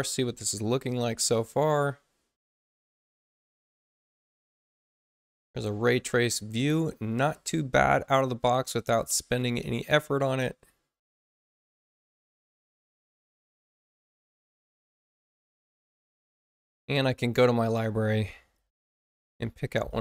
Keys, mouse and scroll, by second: 0.6 click, 12.2 click, 15.8 click, 17.5 click, 18.2-19.7 typing.